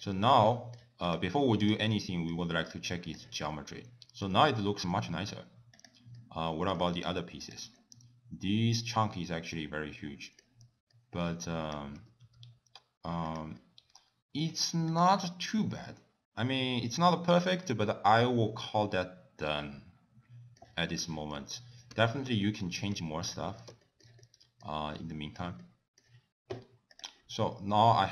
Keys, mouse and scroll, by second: 0.1 middle click, 0.5 middle click, 1.1 click, 1.7 click, 2.4 g, 3.5 middle click, 4.9 middle click, 5.8 click, 6.2 middle click, 6.8 g, 7.8 middle click, 11.0 middle click, 11.7 click, 12.1 g, 13.6 middle click, 15.0 click, 15.2 middle click, 20.9 shift+middle click, 21.6 ctrl+z, 22.1 ctrl+z, 22.3 ctrl+z, 23.0 ctrl+z, 23.6 ctrl+z, 23.9 shift+middle click, 24.3 middle click, 25.0 middle click, 25.7 shift+middle click, 27.0 click.